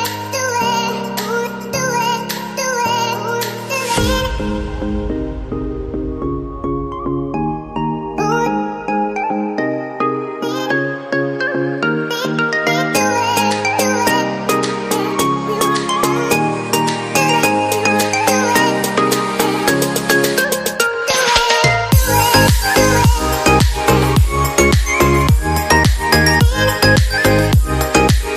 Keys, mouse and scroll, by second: 1.4 right click, 4.5 right click, 6.2 right click, 19.0-26.4 typing.